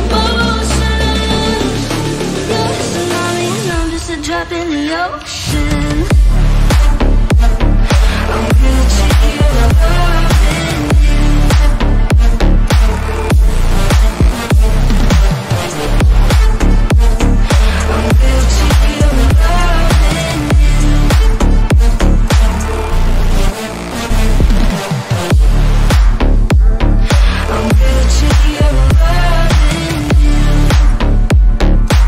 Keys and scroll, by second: 3.2 F3, 6.1 ctrl+shift+z, 26.7 shift+F2.